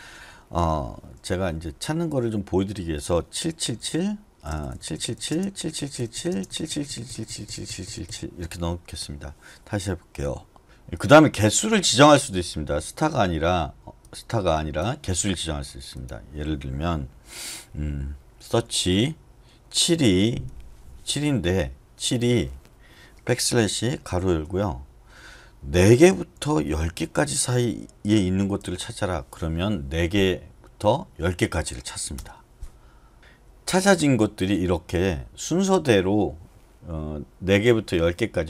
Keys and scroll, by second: 1.1 Escape, 1.4-5.8 typing, 9.0 Escape, 18.5 /, 20.2 7, 23.6-24.1 typing, 25.6-27.4 typing, 28.6 shift+], 32.1 Return, 33.2 n, 33.4 n, 34.2 n, 34.8 n.